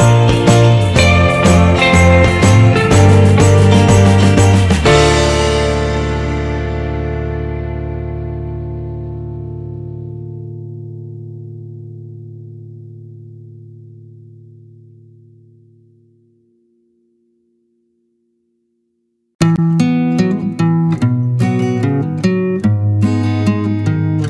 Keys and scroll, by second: 3.1 ctrl+z, 7.9 Return.